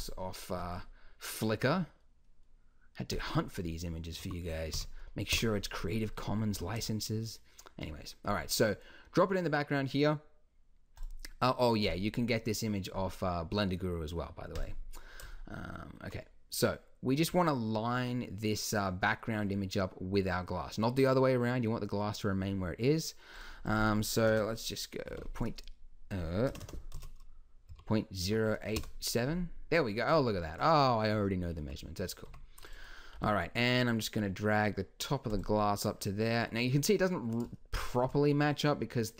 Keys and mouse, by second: 4.9 middle click, 6.1 middle click, 6.5 z, 11.0 click, 11.9-14.6 drag, 23.4-26.6 drag, 26.6 BackSpace, 32.2 Tab, 33.1 g.